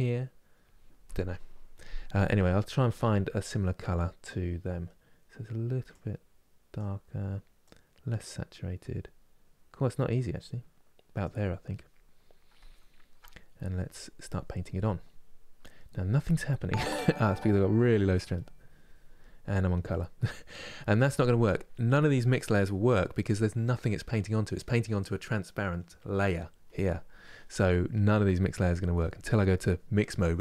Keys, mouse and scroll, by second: 5.7-10.3 drag, 11.7-13.5 middle drag, 13.5-20.8 drag, 28.5-30.4 drag.